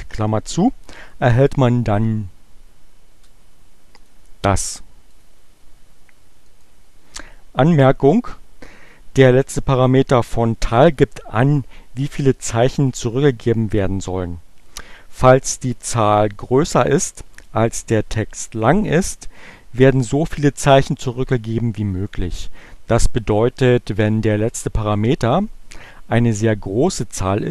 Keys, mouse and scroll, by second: 2.5 Return, 4.0 click, 4.6 click, 5.1 click, 5.8 click.